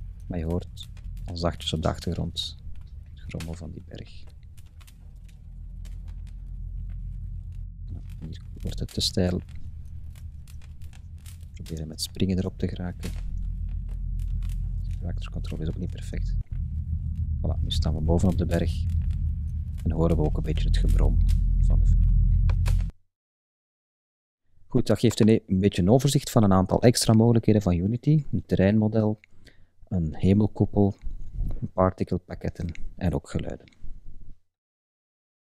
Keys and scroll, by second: 0.0 Right, 0.4 Up, 1.1 Left, 1.2 Up, 2.4 Right, 2.5 Up, 3.1 Right, 3.2 Up, 3.5 Right, 3.7 Up, 3.8 Right, 4.3 Up, 4.5 Left, 5.0 Up, 5.5 Right, 5.8 Up, 6.3 Right, 6.5 Up, 6.9 Right, 7.2 Up, 7.6 Left, 7.8 Up, 8.1 Right, 8.2 Up, 8.7 Left, 8.9 Up, 10.8 Right, 11.4 Up, 12.0 Right, 12.9 Up, 13.6 Right, 15.0 Up, 15.5 Right, 16.3 Up, 18.1 Right.